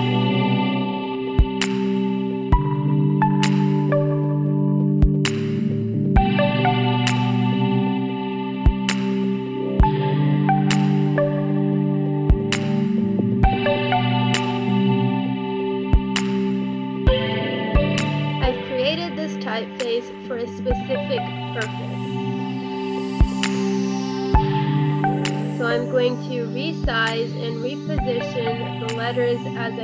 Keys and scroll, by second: 0.7 space, 10.8 space, 12.8 5, 14.0 7, 15.0 6, 15.2 5, 20.3 Right, 21.2 Right, 24.4 1, 24.8 2, 26.9 ctrl+z, 28.2 1, 28.3 2.